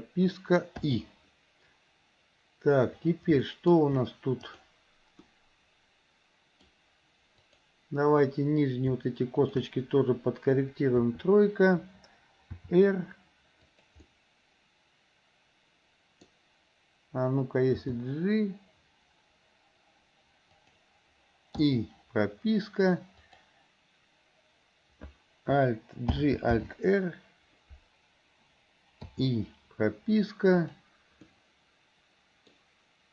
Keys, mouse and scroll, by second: 3.6 middle click, 4.6-5.4 drag, 5.6-6.9 middle drag, 7.6-8.5 drag, 9.5 shift+click, 11.1 KP_3, 12.7 r, 14.1-16.3 middle drag, 17.8 g, 23.3 click, 26.2 alt+g, 26.7 alt+r, 29.2 i, 30.7 click, 31.3-32.6 middle drag.